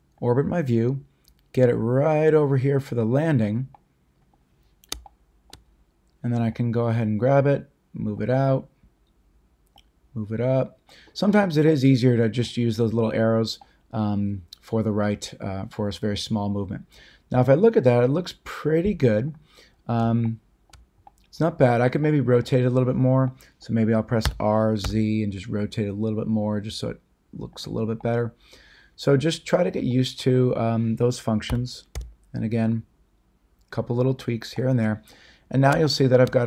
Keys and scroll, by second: 24.2 r, 24.8 z, 31.5 r, 31.9 z.